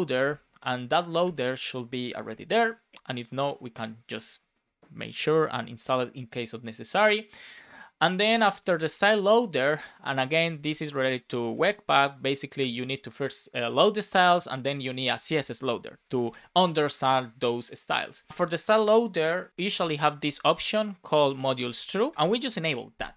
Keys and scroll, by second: 0.5 Right, 1.5 Return, 2.2 shift+[, 2.4 Return, 10.3 shift+;, 10.6 space, 11.5 space, 16.6 Right, 18.3 Return, 19.5 shift+;, 19.7 space, 19.9 shift+[, 20.2 Return, 21.7 shift+;, 21.9 space, 22.1 alt+shift+f, 22.5 super+s.